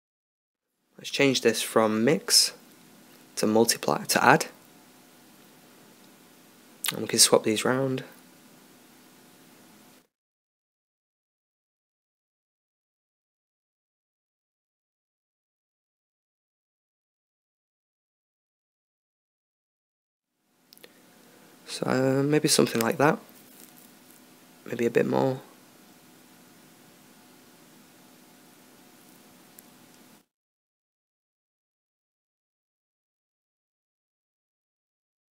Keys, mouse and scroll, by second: 31.5 right click, 32.3 right click.